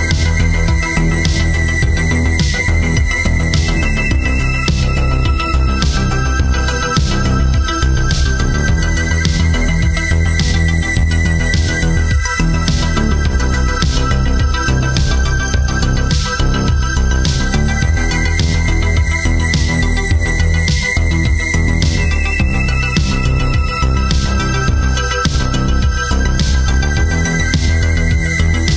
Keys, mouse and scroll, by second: 1.4 alt+shift+click, 19.2 ctrl+alt+click, 19.9 space.